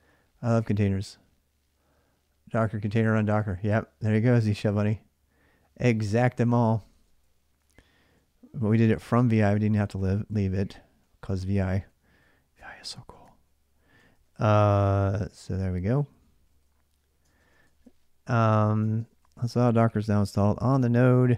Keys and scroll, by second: 0.0-0.4 typing, 6.4-7.9 typing, 9.4-12.4 typing, 13.5-21.3 typing.